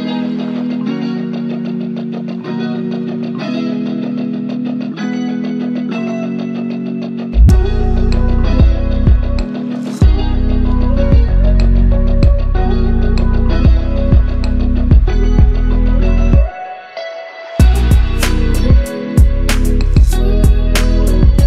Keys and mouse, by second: 1.4 click, 2.0 shift+a, 9.9 middle click, 10.9-21.4 drag.